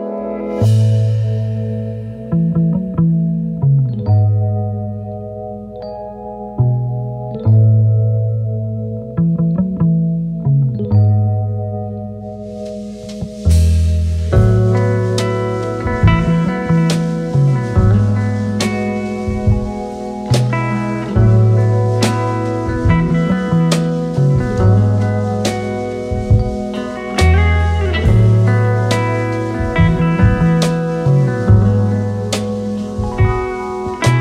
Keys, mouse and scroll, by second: 1.6 click, 4.0-4.9 alt+scroll down 2, 5.5-8.0 drag, 10.8-12.5 typing, 13.1 ctrl+shift+Left, 18.8 click, 26.8 click.